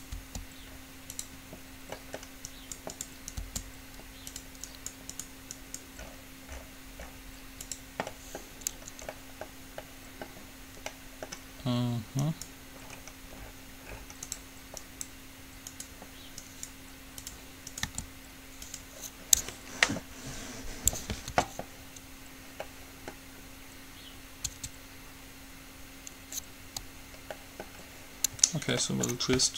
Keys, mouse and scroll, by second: 0.3 g, 2.2 middle click, 3.9 g, 8.4 middle click, 12.4-14.2 right drag, 14.9-19.4 right drag, 18.0 g, 21.5 Tab, 24.7 Tab.